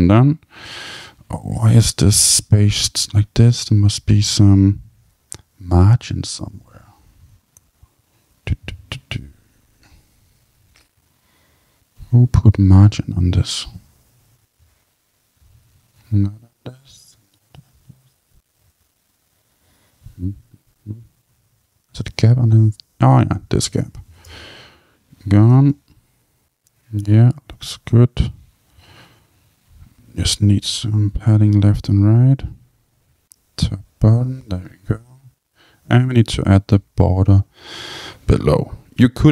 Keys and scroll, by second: 24.2 Return.